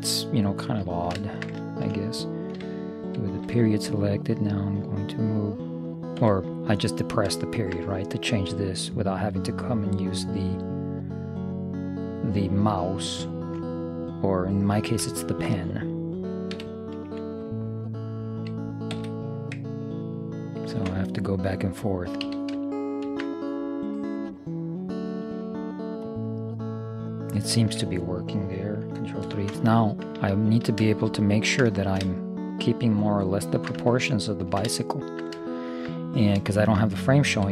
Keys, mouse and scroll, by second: 0.9-3.4 middle drag, 3.4 ., 4.5-6.4 drag, 6.9-8.6 middle drag, 10.2-13.1 drag, 13.4-14.8 middle drag, 16.6 e, 18.5 s, 20.8 ctrl+., 22.3 s, 26.5-28.5 middle drag, 29.3 ctrl+KP_3, 32.8-36.0 middle drag.